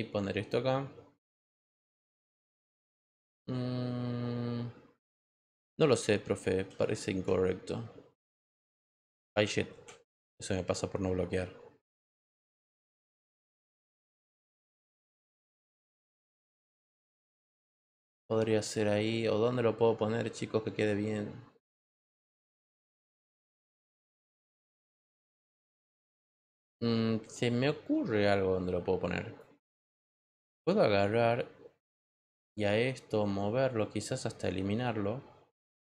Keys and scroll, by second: 6.6 ctrl+z, 9.7 ctrl+z.